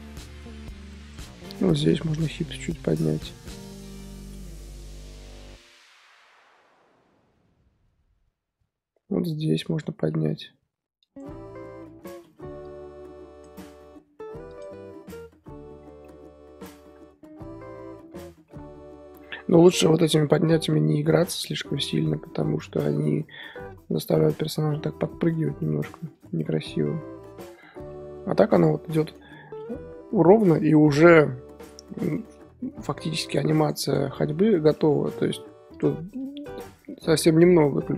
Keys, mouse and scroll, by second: 3.8 i, 4.8-9.7 drag, 10.1 g, 11.7 i, 12.6-14.9 drag, 14.9-16.0 scroll down 10, 16.0-19.0 middle drag, 19.2 middle drag, 19.5-20.7 scroll up 4, 20.7-21.4 middle drag, 21.4 ctrl+z, 21.8 ctrl+z, 22.5 ctrl+z, 22.9 ctrl+z, 23.3 ctrl+z, 23.6 ctrl+z, 24.0 ctrl+z, 24.3 ctrl+z, 24.6 ctrl+z, 24.9 ctrl+z, 25.3 ctrl+z, 27.9-31.6 middle drag, 31.6-32.1 scroll down 3, 32.1-33.2 shift+middle drag, 33.2-33.9 drag, 34.1 z, 34.7 middle click, 35.7 click, 36.1-37.9 middle drag.